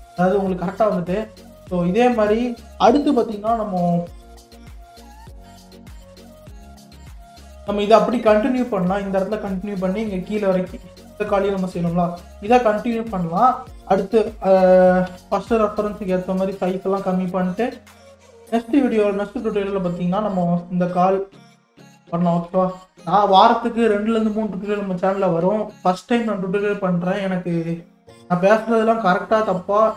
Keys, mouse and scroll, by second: 0.8 scroll down 1, 1.5 scroll down 6, 2.4-4.3 middle drag, 4.3 click, 4.7 click, 5.9 KP_3, 6.6-6.9 scroll down 2, 6.9-9.7 shift+middle drag, 9.7 scroll down 3, 10.2-15.1 shift+middle drag, 15.1 KP_1, 17.4 middle click, 18.2 KP_3.